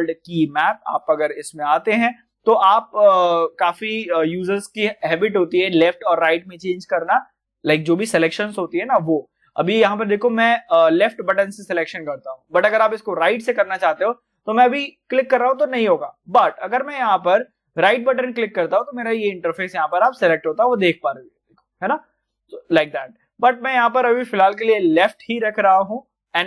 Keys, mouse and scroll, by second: 8.3 click, 8.3 click, 9.4-13.0 middle drag, 13.0 click, 20.7 right click, 21.3 scroll up 1, 21.9-22.7 scroll down 1, 22.7 click.